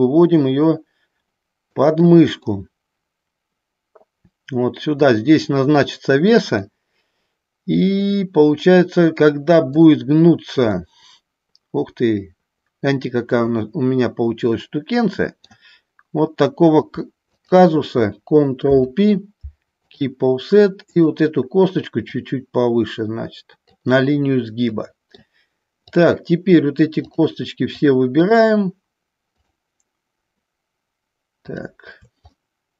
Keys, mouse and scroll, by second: 2.7-5.4 middle drag, 6.7-10.0 middle drag, 11.0-15.7 middle drag, 17.5 shift+click, 18.8 ctrl+p, 21.1 click, 22.3-23.8 drag, 25.0 middle click, 26.0 click, 28.4 shift+click, 29.6 shift+click, 31.7 shift+click, 32.4-32.7 middle drag.